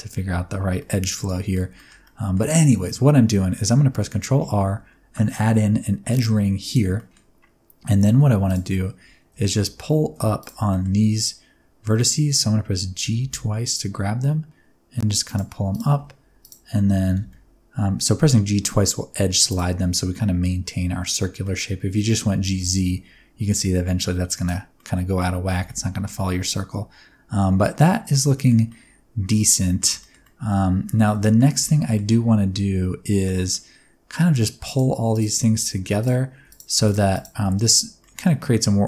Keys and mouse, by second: 0.1 Tab, 0.7 middle click, 1.2 middle click, 1.7 middle click, 2.0 middle click, 3.9 ctrl+r, 6.5 click, 6.9 middle click, 8.0 1, 9.4 alt+z, 9.9 alt+z, 10.6 middle click, 13.0 g, 13.2 g, 15.2 click, 16.4 shift+click, 17.1 g, 17.2 g, 19.5 click, 21.5 middle click, 22.3 g, 22.6 z, 24.3 click, 24.9 middle click, 25.5 Tab, 25.7-28.1 middle drag, 28.3 shift+middle click, 28.7-29.8 middle drag, 30.0 shift+middle click, 30.2 middle click, 31.2 shift+middle click, 31.6 Tab, 31.8 middle click, 33.2 middle click, 36.9 shift+click, 37.4 middle click, 38.0 middle click.